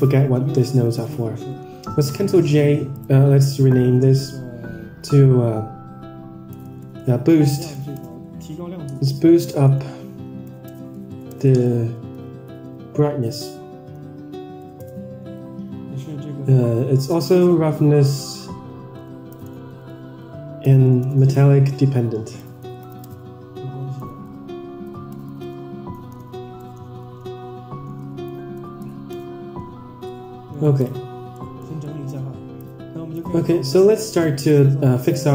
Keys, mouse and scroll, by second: 0.9 ctrl+j, 2.0-29.5 right drag, 25.3 Right, 30.0-30.5 middle drag, 30.7 drag, 31.1 scroll down 3, 31.3 middle drag, 31.7 middle click, 32.6-33.2 drag, 34.0 click, 34.4-35.0 drag.